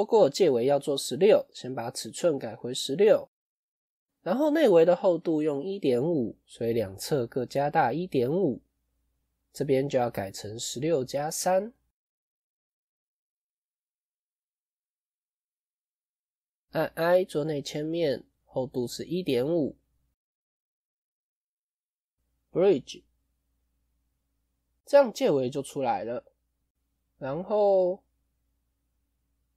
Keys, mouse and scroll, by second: 0.8-3.8 shift+drag, 3.8-6.8 middle drag, 8.2-10.9 shift+drag, 10.9 scroll down 3, 11.0-12.7 middle drag, 12.7 ctrl+a, 14.4 Tab, 14.8-16.5 middle drag, 18.9-21.3 drag, 21.3-23.6 right drag, 23.6-28.2 middle drag, 28.2 KP_1, 29.3-29.5 shift+middle drag.